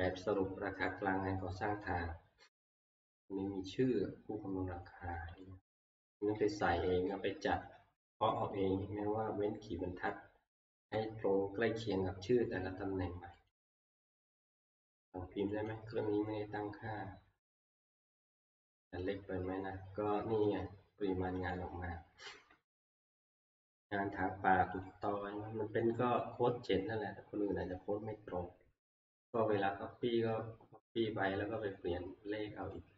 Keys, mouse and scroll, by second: 1.4 scroll, 5.4 click, 8.3 click, 8.6 click, 10.8 Escape, 13.5 click, 15.7 click, 21.5 click, 24.9 click, 32.7 click.